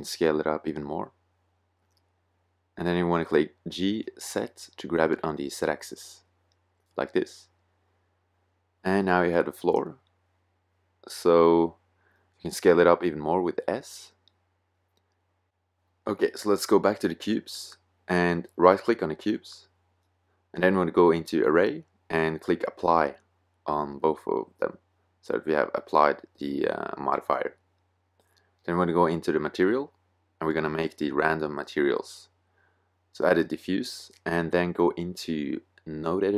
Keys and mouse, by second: 0.3 middle click, 0.9 middle click, 1.6 middle click, 4.0 g, 6.3-7.5 drag, 7.9 middle click, 8.5-10.0 middle drag, 10.0 z, 11.1 z, 11.8 s, 18.9 middle click, 19.6-24.9 drag, 24.9 middle click, 26.9-29.5 middle drag, 29.5-33.6 drag.